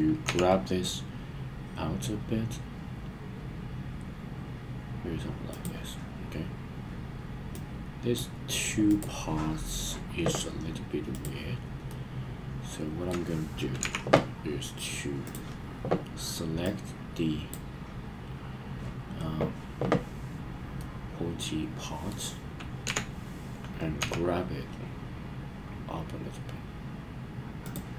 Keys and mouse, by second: 0.2 g, 5.5 click, 7.5 click, 8.9 click, 11.1 click, 11.9-13.1 middle drag, 13.8 KP_1, 15.3 click, 16.8 click, 20.8-22.2 middle drag, 22.8 KP_1, 24.0 g, 27.6 click.